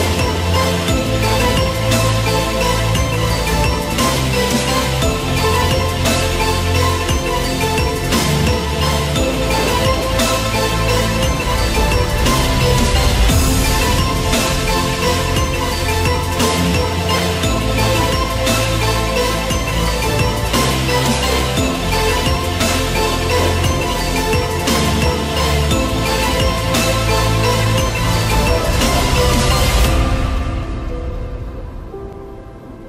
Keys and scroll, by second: 3.5 ctrl+d, 20.1 ctrl+t.